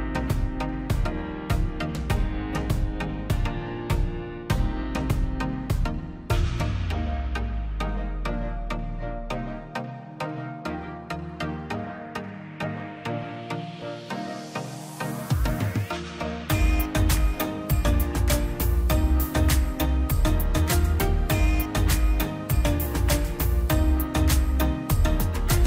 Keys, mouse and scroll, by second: 0.6 p, 1.2-3.2 drag, 3.2 BackSpace, 4.5-4.8 scroll down 1, 4.8 middle click, 5.5-5.9 scroll up 1, 6.1 click, 6.7-7.3 scroll down 1, 7.9 click, 10.2 click, 11.4 click, 12.2-12.5 scroll down 1, 12.5 middle click, 12.7-13.3 scroll up 1, 13.3 middle click, 14.0 scroll up 1, 14.4 middle click, 15.6-15.9 scroll up 1, 16.3 middle click, 17.4 scroll down 1, 17.6 middle click, 17.9-18.3 scroll up 1, 18.3 p, 18.8 click, 19.3-20.1 scroll down 1, 20.3 click, 20.7 scroll down 1, 21.0 middle click, 21.6-22.1 scroll up 1, 22.1 middle click, 23.3 scroll up 1, 24.0-24.4 scroll up 1, 24.4 click.